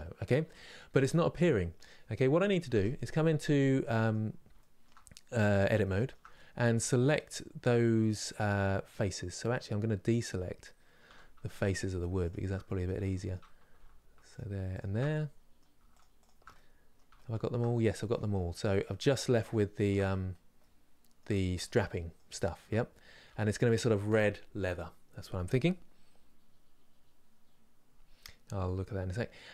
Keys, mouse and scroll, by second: 2.3 Tab, 3.2-4.8 middle drag, 4.8-5.6 scroll up 2, 5.6-10.7 shift+middle drag, 10.7 3, 11.4 shift+Left, 11.9 shift+Left, 12.3-14.0 middle drag, 14.0 alt+shift+Left, 14.4 alt+shift+Left, 14.7 middle click, 15.8 shift+click, 16.2-18.1 middle drag, 18.1 scroll down 2, 18.5-19.8 middle drag, 19.8 scroll down 2, 20.2-22.4 middle drag, 22.4-23.1 scroll up 2, 23.1-29.5 shift+middle drag.